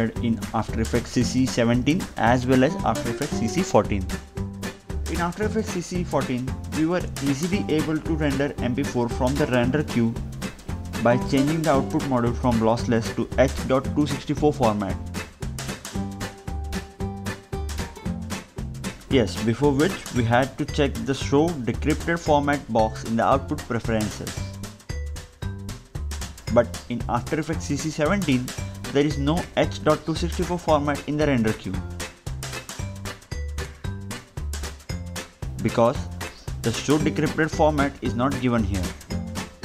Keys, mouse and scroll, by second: 1.6 click, 3.9 click, 5.9 click, 6.7 Delete, 7.2 click, 8.9-9.2 scroll down 1, 9.8 ctrl+m, 11.7 click, 18.1 click, 24.5 click, 25.8 click, 26.6 click, 29.2 ctrl+m, 30.6 click, 30.7 Delete, 31.3 click, 35.4 click, 36.2 click.